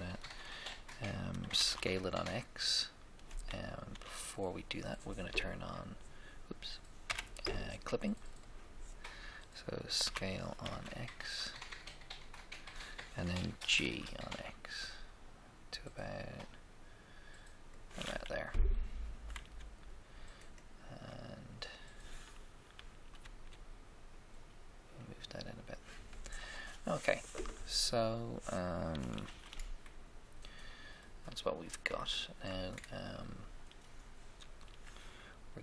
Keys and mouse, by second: 1.5 s, 1.7 x, 4.0 1, 7.0 Escape, 8.3-10.2 drag, 10.2 s, 10.7 x, 13.6 g, 13.8 x, 22.7 g, 23.2 x, 29.3 z, 29.5 middle click, 32.2 middle click.